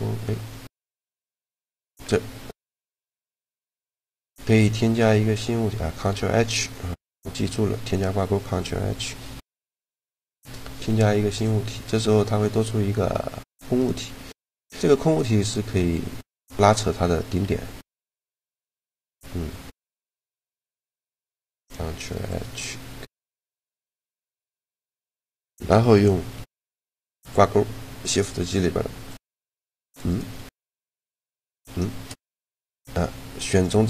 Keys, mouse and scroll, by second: 9.8 ctrl+h, 11.5-12.7 drag, 13.1 Tab, 13.5-15.2 right drag, 14.4 g, 17.2 g, 18.7-20.5 right drag, 18.9 Tab, 20.5 click, 21.5 ctrl+h, 23.7 Tab, 24.8-26.4 drag, 26.0 shift+g, 29.8-32.8 right drag, 30.3 shift+g, 31.8 shift+g.